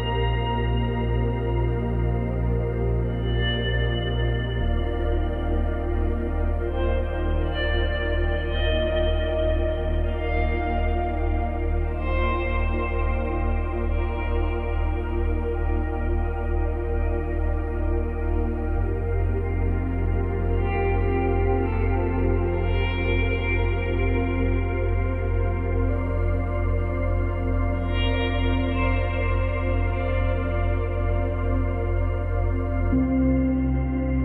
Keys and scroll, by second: 2.4 space, 4.2 space, 5.8 space, 7.3 space, 14.7 space, 15.9 space, 22.8 space, 27.8 space, 28.1 ctrl+z, 29.0 space, 32.0 space.